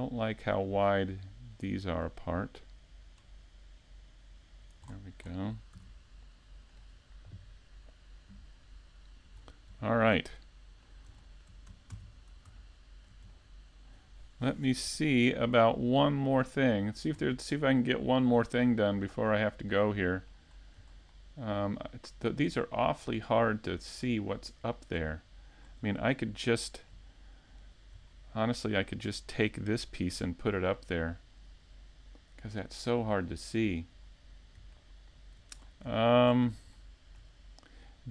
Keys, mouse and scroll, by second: 1.2-1.7 scroll down 2, 1.8 middle click, 5.8 scroll down 1, 6.1 middle click, 6.7 scroll up 1, 7.2 scroll down 1.